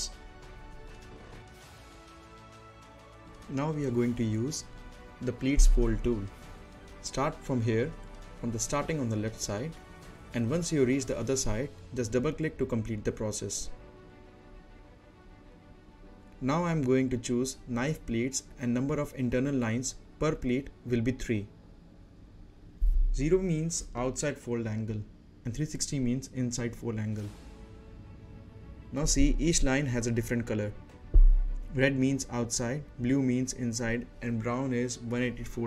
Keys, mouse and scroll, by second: 1.0-1.8 scroll up 1, 1.8-3.2 middle drag, 5.2 click, 7.9-16.4 drag, 21.9 click, 22.7-23.5 scroll down 1, 23.5 middle click, 23.9 scroll up 1, 24.8 z, 25.9 click, 29.4 click, 33.4 click.